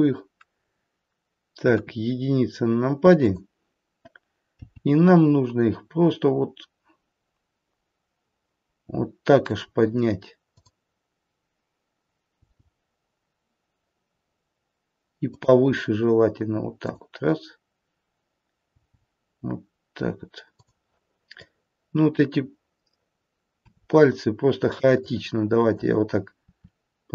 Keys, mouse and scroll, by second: 1.7 KP_1, 3.1 click, 6.1 g, 10.5 click, 12.4 g, 16.7 click, 18.5 g, 21.4 click, 23.5 r, 24.9 click, 26.4 r.